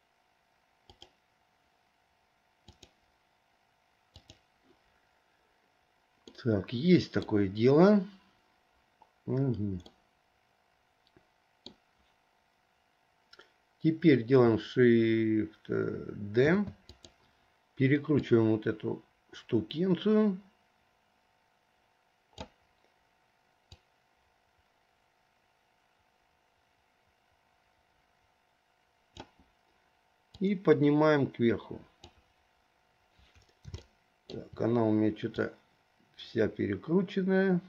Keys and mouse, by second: 6.6-7.6 middle drag, 10.2-11.9 middle drag, 16.7 shift+d, 18.3-22.8 drag, 24.2-29.4 drag, 30.5-32.3 drag, 34.1 shift+middle click, 35.5 click, 35.7-37.6 drag.